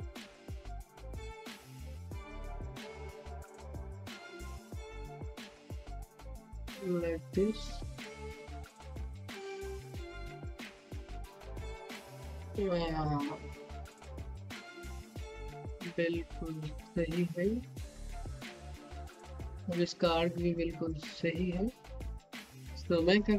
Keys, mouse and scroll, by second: 0.3 click, 2.0-8.0 typing, 9.0 click, 9.9-22.3 typing.